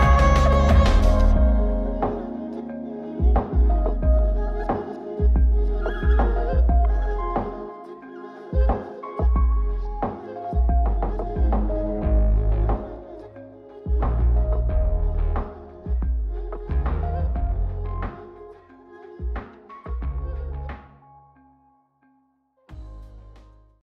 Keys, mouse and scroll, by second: 0.2 click, 4.0 click, 6.8 click, 11.1 click, 15.5 click, 19.6 drag.